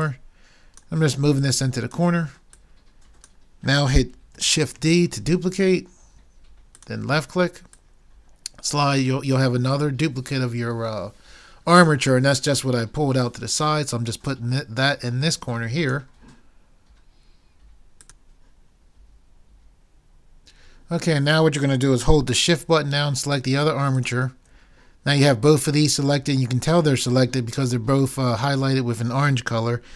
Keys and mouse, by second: 4.9 shift+d.